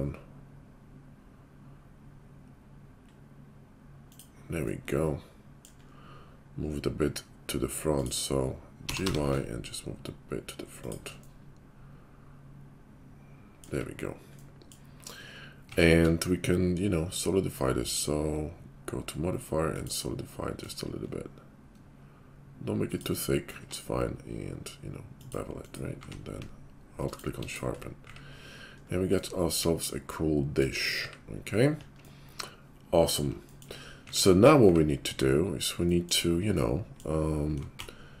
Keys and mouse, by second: 7.9 click, 8.0-20.7 middle drag, 8.8 g, 13.8 `, 15.6 Tab, 16.0 q, 20.7 shift+click, 21.0-22.0 middle drag, 22.0-23.1 shift+drag, 23.1-27.5 middle drag, 23.5 q, 25.9 q, 27.5 click, 27.6-37.6 middle drag, 28.0 `, 31.0 `, 34.0 `, 34.6 `, 37.7 shift+s.